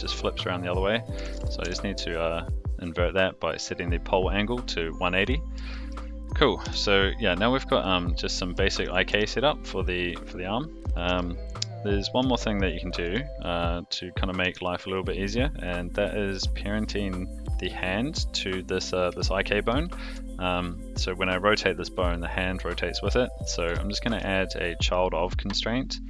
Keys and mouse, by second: 0.3-2.1 drag, 5.7 shift+middle drag, 6.6 g, 7.8-8.3 middle drag, 8.7 shift+middle drag, 9.1 g, 11.0 alt+g, 12.3 shift+middle drag, 13.0 r, 19.1-19.7 shift+middle drag, 20.4 shift+click, 24.0 ctrl+shift+c, 25.9 click.